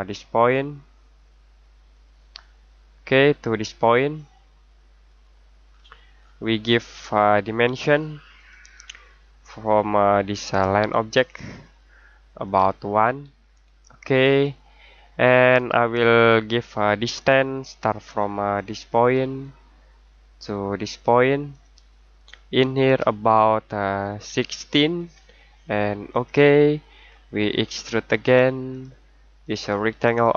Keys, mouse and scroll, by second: 1.9 click, 5.0 click, 5.7-7.0 scroll down 1, 8.3 click, 11.1 click, 13.0 typing, 14.2 click, 14.9-15.2 scroll down 1, 15.2-16.6 scroll up 1, 16.6-19.2 scroll down 1, 19.2 click, 24.2 typing, 26.1 click, 27.0 scroll down 1, 27.2-28.7 scroll up 1, 28.7 click.